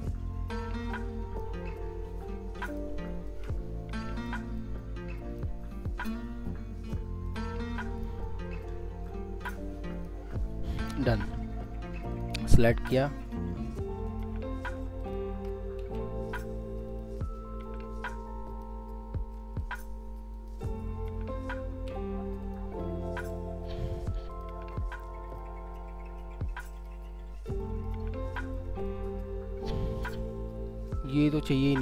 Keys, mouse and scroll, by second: 1.8 alt+shift+click, 3.3 alt+shift+click, 4.6 alt+click, 5.8 alt+click, 7.2 alt+click, 9.1 alt+click, 12.1 ctrl+click, 14.1 alt+click, 15.8 ctrl+z, 16.9 shift+click, 17.6 ctrl+z, 18.5 alt+click, 19.6 ctrl+click, 20.3 ctrl+click, 21.7 ctrl+z, 22.4 ctrl+click, 26.7 ctrl+click, 27.2-27.6 ctrl+scroll up 2, 27.6 alt+middle click, 28.2 alt+scroll up 1, 30.3-30.6 scroll down 1, 31.2 alt+middle click.